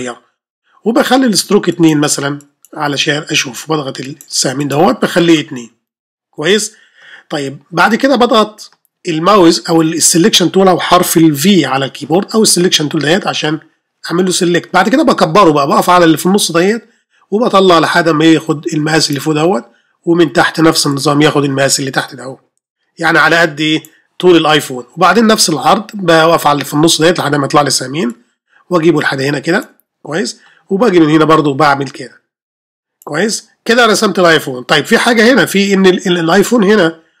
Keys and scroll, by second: 13.3 ر.